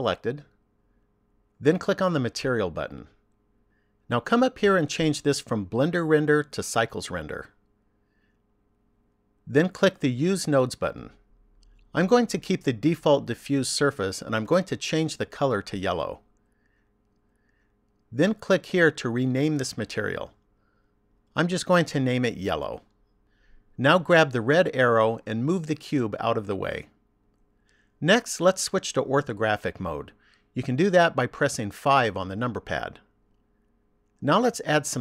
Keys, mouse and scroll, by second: 3.2 click, 5.9 click, 11.0 click, 14.4 click, 19.6 click, 21.8 l, 25.3 click, 31.9 KP_5.